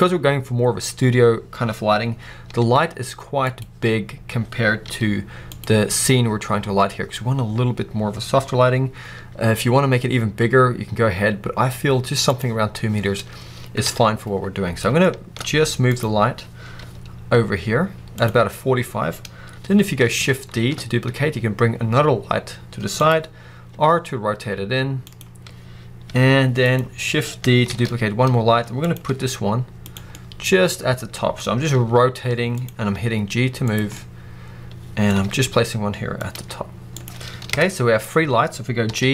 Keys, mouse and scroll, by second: 2.4 r, 3.5-4.8 drag, 4.8 g, 5.6-9.0 drag, 9.0 s, 12.3 right click, 13.7 KP_7, 14.7 scroll down 1, 15.0 shift+middle click, 15.4-16.1 middle drag, 15.4 z, 16.1 scroll up 1, 16.7 g, 17.9 middle click, 18.1 click, 20.4 shift+d, 23.0 click, 23.6 r, 25.0 click, 25.9 g, 26.6 click, 27.5 shift+d, 28.8 click, 29.0 r, 29.8 click, 30.0-30.6 middle drag, 30.9 middle click, 31.6 r, 32.5 click, 32.8 g, 33.6 click, 33.8-34.8 middle drag, 35.1 r, 36.2 click, 36.8 g, 36.9 click, 37.4 KP_0, 38.8 z.